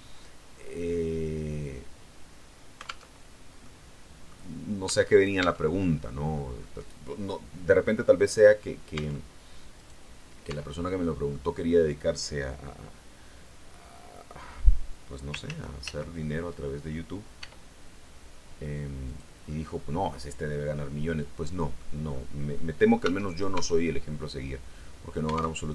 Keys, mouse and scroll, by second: 3.0 alt+Tab, 3.5 middle click, 4.8 Tab, 5.0 right click, 6.5-8.0 middle drag, 8.8 Tab, 9.6 right click, 10.4 Tab, 10.7 middle click, 15.4 ctrl+z, 17.3 e, 19.0 click, 19.4-21.8 middle drag, 22.4 middle click, 22.9 Tab, 23.2 right click, 24.1-25.5 middle drag, 25.5 alt+Tab.